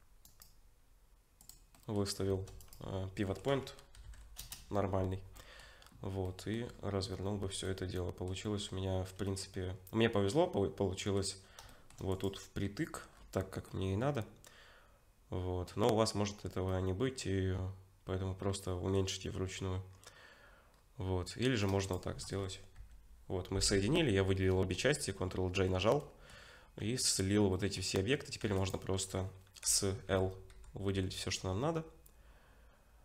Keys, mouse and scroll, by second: 0.2 right click, 1.7 middle click, 2.3 shift+d, 3.3 r, 5.4 middle click, 5.8-7.5 scroll up 6, 6.2 middle click, 7.7 middle click, 8.6-8.9 scroll up 2, 9.3 middle click, 11.4 scroll up 1, 11.7 shift+middle click, 12.1 click, 13.1-13.7 scroll down 4, 13.7 middle click, 13.7-14.4 scroll down 1, 16.3-16.7 scroll up 2, 16.7 middle click, 19.9-20.7 scroll down 2, 20.7 scroll down 2, 21.8 shift+click, 22.8 ctrl+j, 24.5 middle click, 25.2 scroll down 2, 25.8 scroll down 1, 26.0 middle click, 26.5 scroll up 3, 26.8 Tab, 27.5 middle click, 28.1 scroll down 2, 28.4 3, 28.6 click, 29.7 l, 30.5 l.